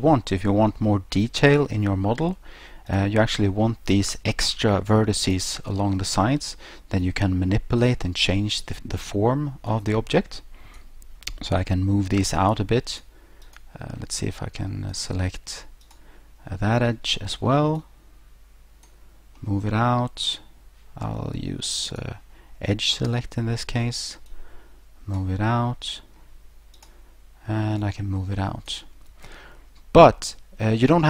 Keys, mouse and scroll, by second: 0.1-0.6 scroll down 2, 0.5 scroll up 2, 1.9 scroll down 1, 2.9 right click, 5.3 shift+right click, 7.0 click, 9.7 click, 12.9 right click, 13.5 right click, 14.9 right click, 15.8 shift+right click, 16.9 middle click, 16.9 scroll, 17.8 click, 19.4 middle click, 21.9 click, 23.0 right click, 24.3 click, 25.6 middle click, 26.8 right click, 27.8 click, 29.4 middle click.